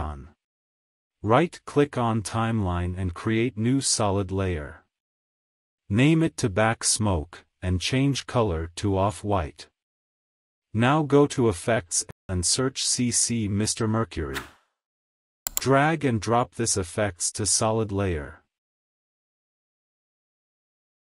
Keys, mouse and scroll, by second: 0.5 click, 1.2 space, 3.0 right click, 3.2 click, 4.5-7.5 typing, 7.7-9.6 drag, 12.8 click, 14.7-16.3 typing, 18.1-21.1 drag.